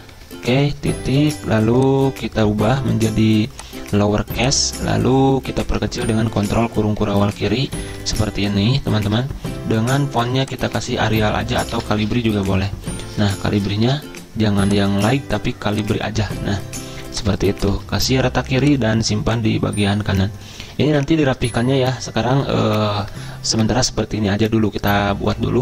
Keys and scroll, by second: 0.0-1.3 typing, 6.4 ctrl+[, 6.5 ctrl+[, 6.7 ctrl+[, 6.8 ctrl+[, 6.9 ctrl+[, 10.8-14.4 typing, 17.7 ctrl+a.